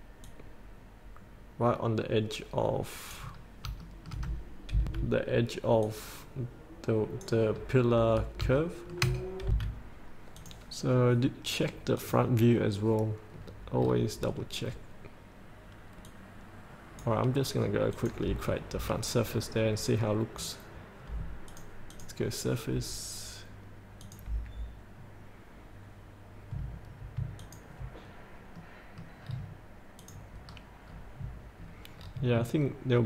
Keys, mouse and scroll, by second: 0.5-3.4 drag, 3.6 scroll up 1, 4.2 shift+middle click, 5.0 F8, 6.0 click, 6.5 click, 7.8-8.6 scroll up 1, 8.8 shift+middle click, 9.7 F8, 10.6 click, 13.6-14.4 scroll down 1, 14.4-16.2 scroll down 1, 16.2-17.9 drag, 18.6-18.9 scroll up 1, 19.9-21.0 middle drag, 21.0 scroll down 1, 21.7 click, 27.6 ctrl+click, 28.2-28.7 scroll down 1, 28.7 middle click, 29.4 scroll down 1, 30.6-30.9 scroll up 1, 31.8 scroll down 1.